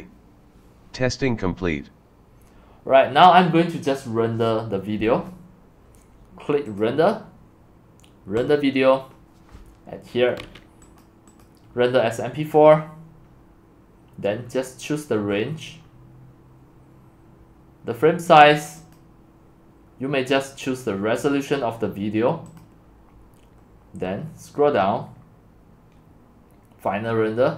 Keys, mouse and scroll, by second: 6.8 click, 11.3-14.4 drag, 14.4-17.7 middle drag, 14.4 scroll, 15.3-16.3 scroll, 19.0-20.9 drag, 22.6-23.0 drag, 23.3-24.1 drag, 24.1-25.2 middle drag, 24.1-25.2 scroll down 10, 25.2-27.3 drag, 27.3 scroll down 3.